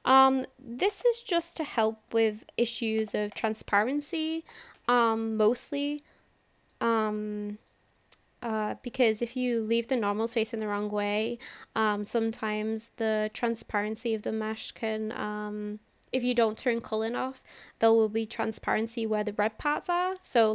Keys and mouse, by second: 0.9 click, 1.8 ctrl+l, 2.3 alt+n, 3.4 click, 5.1-6.8 middle drag, 7.2 shift+middle click, 9.3 click, 10.0 click, 10.8 shift+middle drag, 11.2-16.2 middle drag, 17.3-20.5 middle drag.